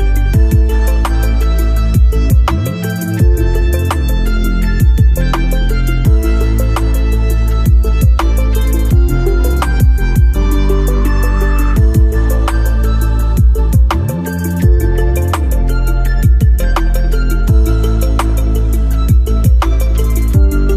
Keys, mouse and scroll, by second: 0.0 alt+scroll up 1, 0.6-1.2 scroll down 1, 1.3-3.6 alt+middle drag, 4.4 space, 6.3 click, 8.0 alt+middle click, 9.1-12.0 alt+drag.